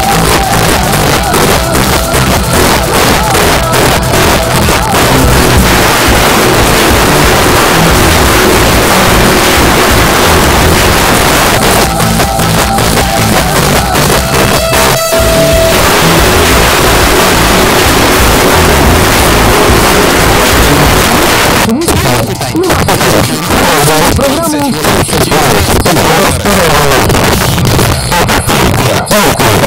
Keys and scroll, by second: 11.0 Page_Down, 21.1 Page_Down.